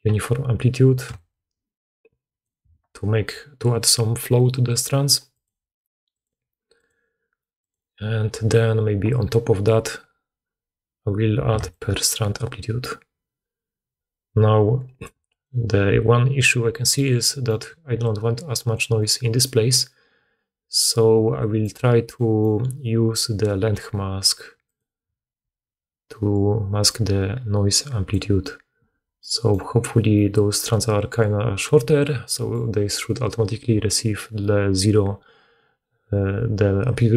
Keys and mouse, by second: 17.8-18.9 d, 19.4 d, 19.4 d, 21.5 middle click.